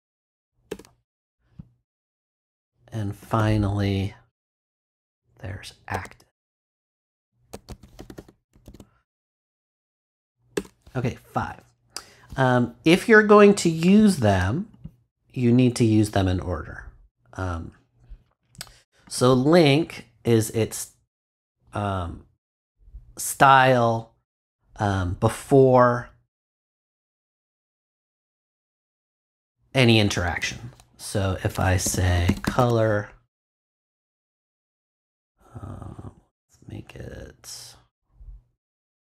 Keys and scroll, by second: 0.0-0.1 typing, 0.7 shift+Return, 1.2 Return, 3.2 Return, 5.9-10.2 typing, 10.5 shift+Return, 31.8 c, 32.5 r, 33.9 shift+;.